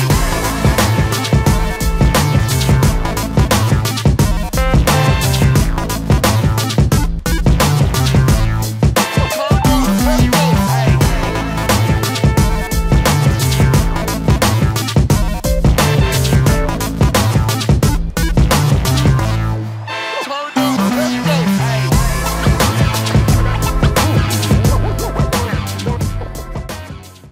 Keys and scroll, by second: 9.4 Return.